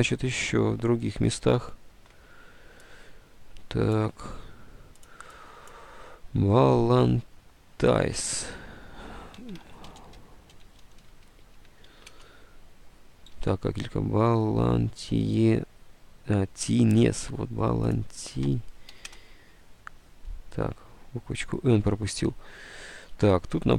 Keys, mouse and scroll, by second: 1.5 alt+Tab, 7.8 alt+Tab, 9.2-12.2 typing, 12.2 Return, 13.3 alt+Tab, 16.9 alt+Tab, 19.0 n, 19.2 Return, 22.3 alt+Tab, 23.2 alt+Tab.